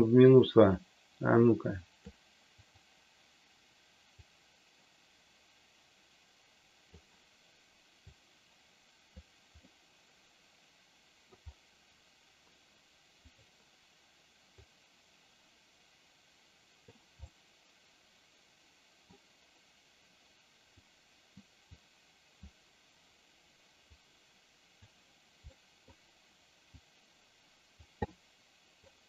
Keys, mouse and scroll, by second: 4.3-6.8 drag, 8.1-9.2 drag, 9.6-11.3 middle drag, 13.2 click, 14.7-16.8 drag, 17.2-19.1 middle drag, 20.7 click, 21.7 click, 24.0 click, 25.4 middle click, 26.7-27.7 drag, 28.1 middle click.